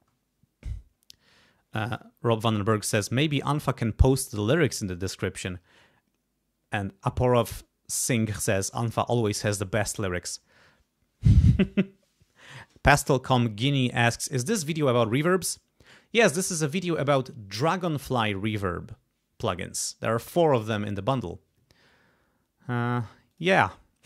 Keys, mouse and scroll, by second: 23.3 click.